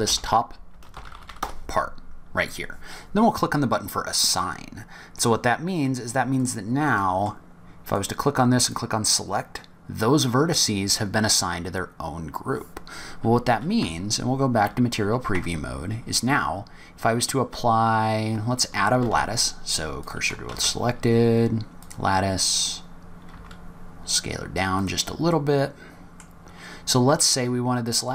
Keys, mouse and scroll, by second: 4.2 click, 5.5 click, 6.2 click, 6.7 middle click, 7.7 click, 8.5 click, 12.3 scroll down 3, 13.1-13.7 scroll up 1, 13.7 z, 15.1 Tab, 18.9 shift+s, 20.4 shift+a, 22.7 scroll down 2, 23.5 s, 25.2 middle click, 28.0 middle click.